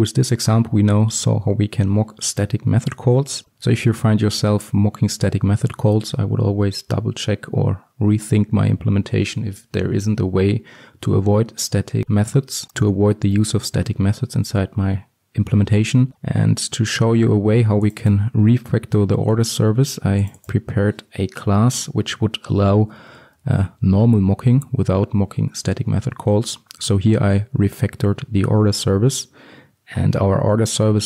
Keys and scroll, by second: 16.0 alt+1, 23.1 alt+1.